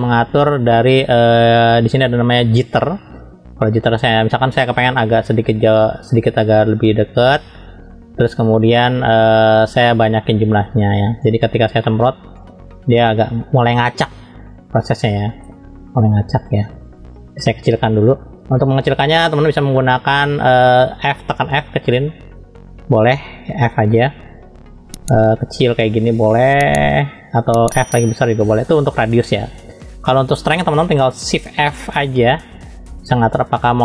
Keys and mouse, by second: 1.3-11.0 drag, 11.9 middle click, 12.4-13.4 drag, 16.1 ctrl+z, 21.4 f, 27.5 f, 32.0 shift+f.